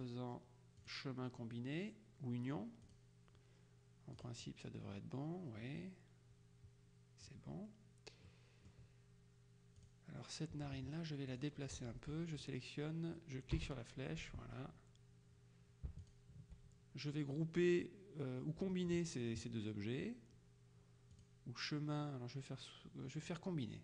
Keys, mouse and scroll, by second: 0.9 click, 2.9 click, 4.2 click, 8.4 middle click, 9.9 click, 11.4 click, 13.7 BackSpace, 16.1 shift+click, 21.2 click.